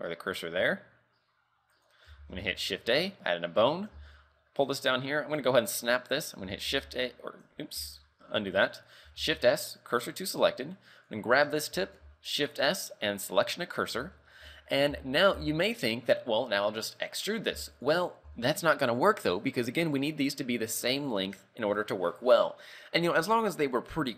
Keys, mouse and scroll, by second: 1.8 click, 2.2 shift+a, 3.1 scroll down 4, 3.6-4.0 scroll up 2, 4.0 g, 5.4 right click, 6.7 shift+a, 7.9 ctrl+z, 9.2 shift+s, 11.0 right click, 12.1 shift+s, 14.3 shift+middle click, 14.6-15.0 scroll up 2, 15.0 z, 15.4 z, 15.9 scroll down 2, 17.6 z, 17.9 right click, 18.3 z.